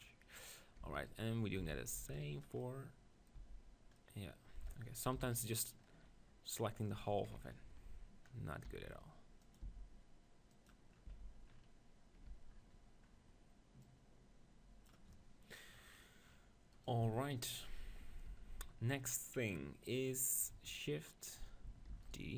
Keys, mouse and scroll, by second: 0.8 Tab, 1.1 right click, 1.6 z, 2.0 b, 3.0-5.1 middle drag, 3.4 z, 5.2 KP_1, 7.2 ctrl+KP_1, 8.2 middle click, 8.7 e, 9.7 s, 10.9-12.2 drag, 11.1 Tab, 12.4 Tab, 16.7-18.2 right drag, 18.0 click, 18.3 Tab, 18.9-20.5 middle drag, 21.9 shift+d, 22.2-22.3 drag.